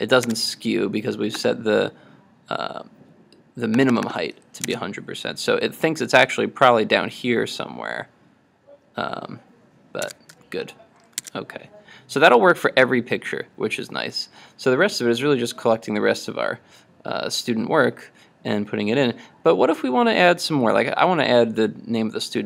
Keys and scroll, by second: 0.3 super+Tab, 10.1 super+Tab, 11.3 super+Tab.